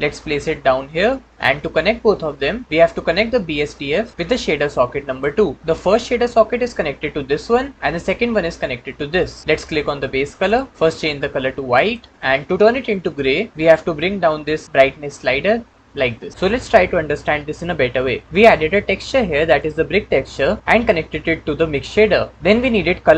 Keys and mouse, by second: 4.1 click, 18.6-19.4 drag.